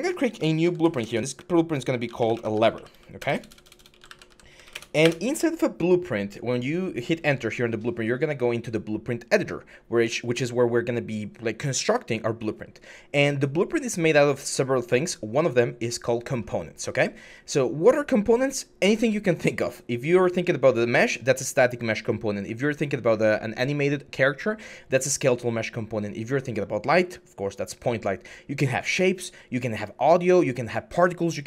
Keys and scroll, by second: 0.4 typing, 1.9-4.4 typing, 4.6 Return, 4.9 Return.